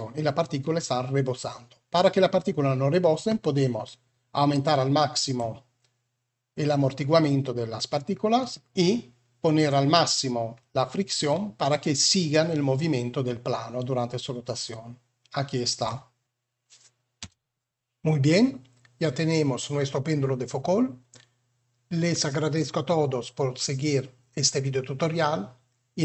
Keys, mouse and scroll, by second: 4.5 click, 11.3-12.4 middle drag, 17.1 space.